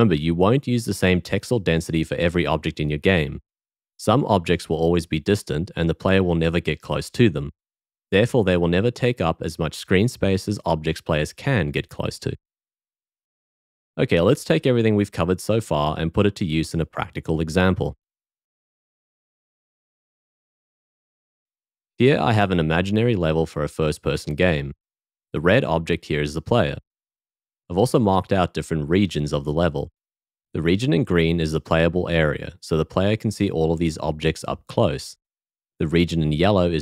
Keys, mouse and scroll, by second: 21.5 w, 25.9 w, 26.9 g.